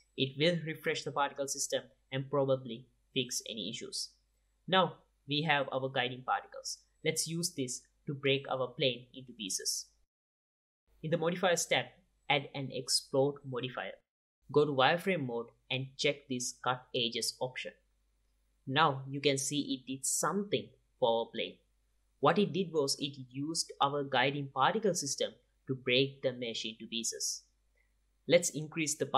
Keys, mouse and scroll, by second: 2.9-4.8 middle drag, 6.3-8.7 drag, 10.2-12.6 drag, 15.6 z, 18.9-20.7 drag, 20.5-22.6 middle drag, 23.6-24.0 middle drag, 28.0 click, 28.7-29.1 middle drag.